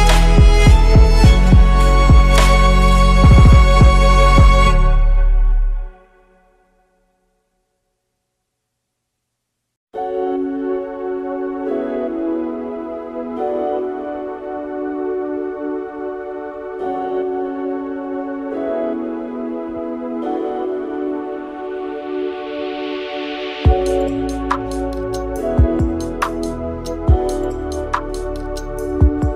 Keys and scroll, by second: 7.8 Tab, 13.0 ctrl+c, 18.2 Delete, 21.6 8, 22.1 Tab, 23.0 Delete, 23.2 Delete, 26.1 ctrl+z, 26.4 Delete, 27.3 F2.